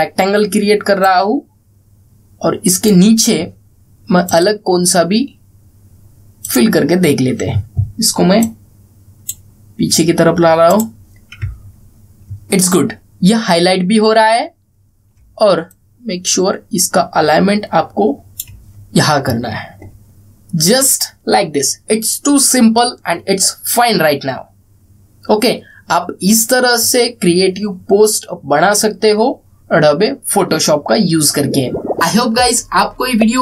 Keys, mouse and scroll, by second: 0.2-3.6 drag, 7.3-11.4 drag, 12.3-12.7 alt+scroll down 1, 13.3-13.6 alt+scroll up 1, 16.4-19.2 drag, 19.4 alt+scroll down 1.